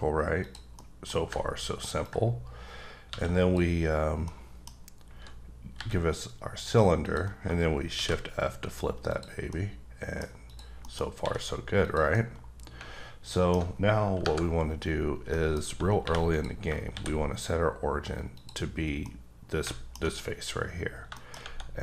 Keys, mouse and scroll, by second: 0.4 click, 0.7 middle click, 2.0 ctrl+click, 3.1 a, 4.2 middle click, 5.7 b, 7.1 click, 7.9 shift+f, 9.1 click, 9.5 middle click, 10.5 click, 10.8 middle click, 11.2 s, 11.8 click, 12.1 middle click, 15.0 scroll down 3, 15.3 middle click, 15.6-16.0 scroll up 2, 16.0 3, 16.3 click, 16.9 shift+s, 18.3 click, 19.0 middle click, 20.8-21.1 scroll up 3, 21.1 shift+middle click.